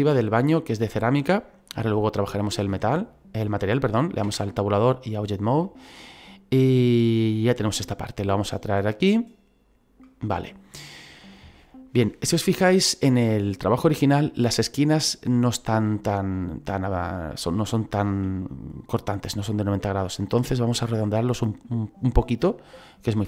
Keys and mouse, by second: 1.0 click, 4.2 Tab, 5.2 click, 5.6 middle click, 7.1 middle click, 8.3 click, 10.3 middle click, 11.6 middle click, 14.0 middle click, 17.1 middle click, 17.8 middle click, 20.9 middle click.